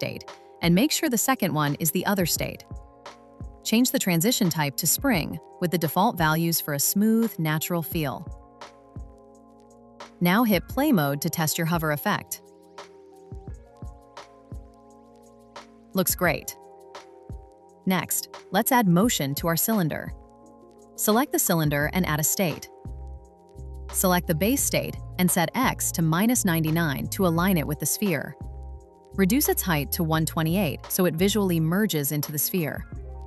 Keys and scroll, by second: 27.2 Return, 30.2 Return.